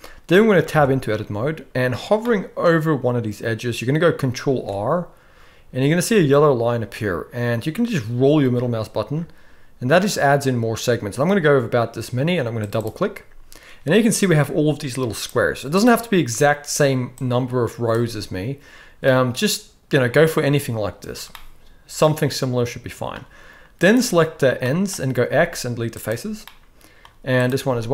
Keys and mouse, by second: 0.3-0.6 middle drag, 0.7 Tab, 2.2-3.7 middle drag, 4.5 ctrl+r, 15.2 click, 17.3 click, 19.1-20.3 middle drag, 21.3-23.1 middle drag, 23.8 click, 24.6 middle click, 25.2 x, 26.5 middle click, 27.6 x.